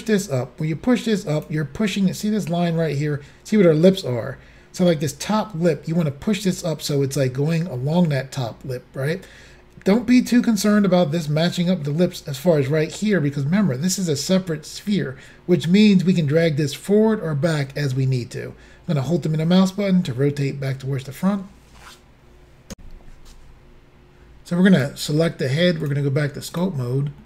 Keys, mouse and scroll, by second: 18.9 middle click, 22.8 Insert, 24.8 click, 25.9 click, 26.6 click.